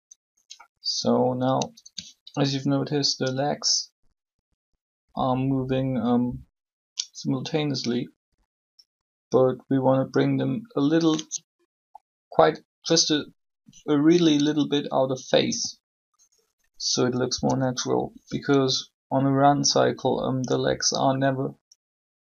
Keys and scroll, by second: 15.4 a, 17.3 b.